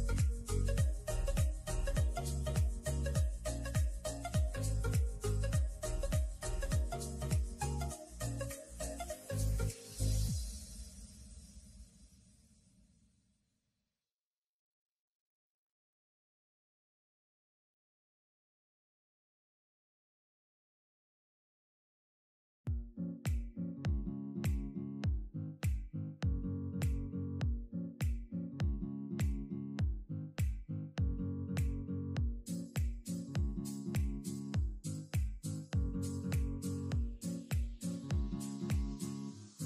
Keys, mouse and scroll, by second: 0.2 alt+click, 1.2 shift+s, 4.5 Tab, 4.6 click, 4.9 click, 5.3 shift+s, 6.4-7.8 scroll down 11, 7.8 Tab, 8.3 shift+s, 8.8 shift+s, 9.2 shift+s, 10.3-10.9 scroll down 11, 10.9-11.8 scroll up 19, 11.8 ctrl+z, 12.2-12.6 scroll down 6, 12.6 ctrl+z, 13.1 Tab, 13.6 s, 16.0 s, 17.4 g, 18.3-19.0 scroll up 11, 19.0 shift+middle click, 19.5 g, 20.4 shift+middle click, 21.1 g, 23.2 Tab, 23.4-27.5 right drag, 27.5 shift+s, 29.9 Tab, 30.1-31.7 middle drag, 31.7 s, 32.5 middle click, 33.1 s, 33.7 middle click, 33.9 scroll up 2, 34.2 s, 34.7-35.8 middle drag, 35.8 KP_7, 36.6 scroll up 1, 36.8 3, 37.1 click, 37.4 shift+click, 37.8 middle click, 38.3 KP_3, 39.1 shift+drag.